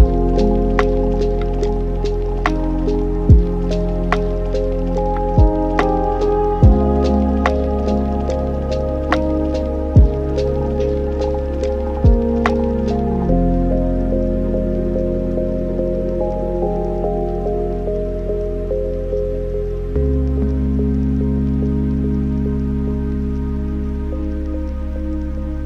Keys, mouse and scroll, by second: 1.1-4.2 drag, 5.4-7.6 drag, 7.6-8.1 scroll up 5, 8.6 click, 9.0-10.0 scroll down 2, 10.0-15.6 drag, 15.6 n, 16.1 scroll down 5, 16.8-18.1 middle drag, 18.1 click, 19.3-22.7 drag, 22.7-25.6 middle drag.